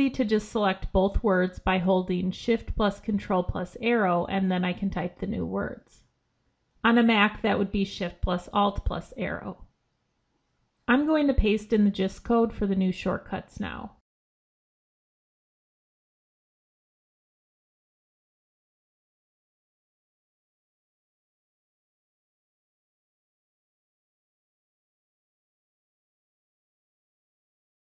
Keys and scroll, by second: 1.4 ctrl+shift+Left, 9.1 ctrl+x, 20.3 ctrl+c.